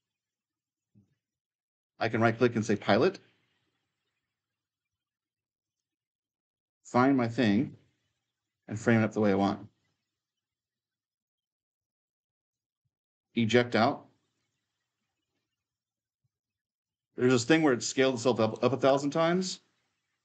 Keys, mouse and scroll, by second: 2.4-4.5 right drag, 5.5 click, 6.0-7.2 middle drag, 7.2-9.1 right drag, 7.6-9.5 typing, 10.7 q, 14.2 click, 15.1-17.6 typing, 15.8 click, 16.0-17.9 right drag, 18.1-20.2 right drag.